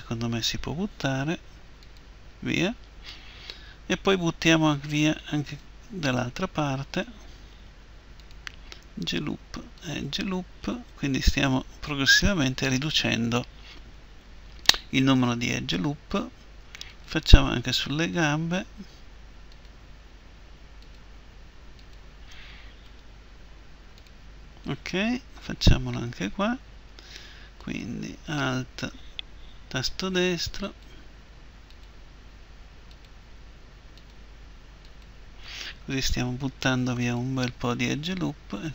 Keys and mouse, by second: 1.0 Delete, 5.5-13.9 right drag, 7.5 Delete, 10.7 Delete, 16.9-26.0 right drag, 22.9 Delete, 27.6-36.7 right drag, 36.1 Delete.